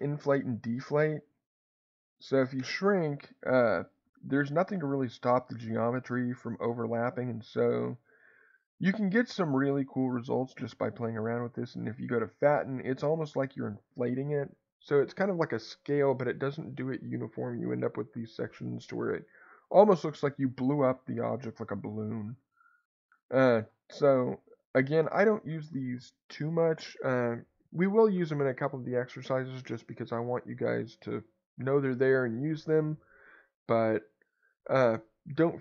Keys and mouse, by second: 0.5-23.9 drag, 23.6 Escape, 35.5 click.